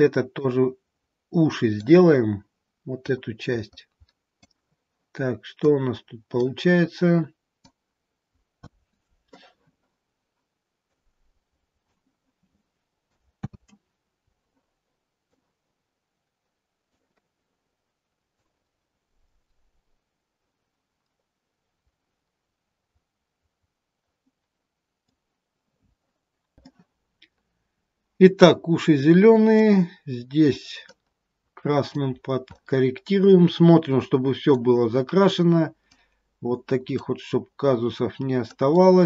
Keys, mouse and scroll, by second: 3.1 click, 5.5 click, 7.7 click, 8.4 ctrl+z, 11.1 click, 13.7 ctrl+z, 15.2 click, 26.5 scroll down 1, 26.6 middle click, 31.0 click, 32.3 scroll down 2, 32.5 middle click, 35.1 scroll down 2, 35.9 click, 37.5-38.6 scroll down 1, 38.6 click.